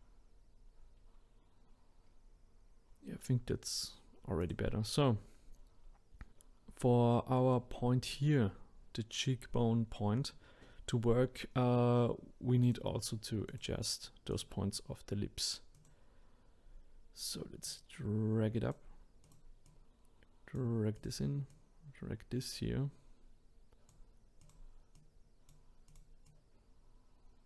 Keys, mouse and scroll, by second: 4.4 click, 5.0-6.8 scroll up 3, 6.8 scroll down 2, 7.1 middle click, 8.1-10.3 drag, 10.3-12.6 middle drag, 12.6 click, 13.5 click, 14.3 click, 15.7 click, 16.6-17.6 scroll up 2, 17.6 click, 19.2 click, 19.6 click, 20.9 click, 21.5-24.5 drag, 24.9 click, 25.9 click.